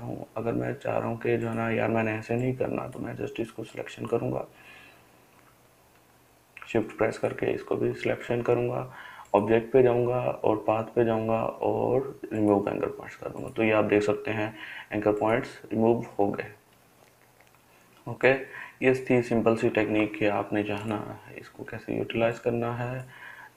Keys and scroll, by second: 19.5 ctrl+z.